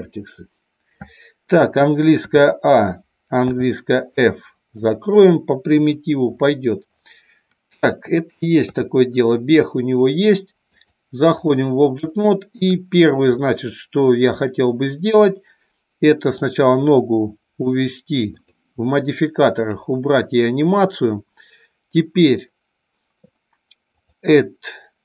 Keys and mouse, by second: 2.1 a, 3.3 f, 4.1 middle click, 5.7 KP_1, 8.6 KP_3, 10.7 click, 12.1-12.5 shift+middle drag, 16.1-17.6 drag, 19.5 click, 24.0-25.0 drag.